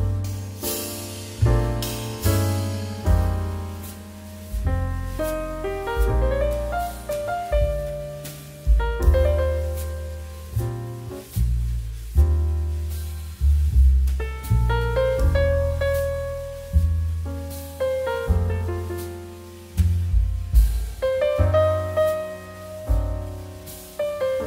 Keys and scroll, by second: 7.1 shift+q, 10.7 shift+q, 17.4 ctrl+b, 22.1 space.